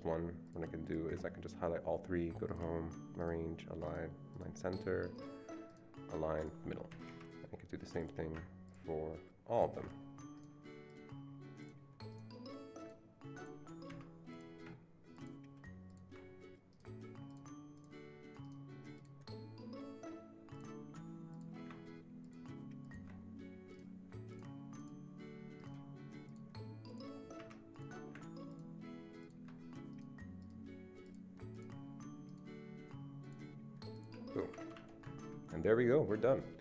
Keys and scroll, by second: 6.9 Escape, 7.1 Escape, 13.8 Escape, 19.1 Escape, 27.4 Escape, 33.2 Escape, 34.4 Escape, 34.6 Escape, 34.7 Escape.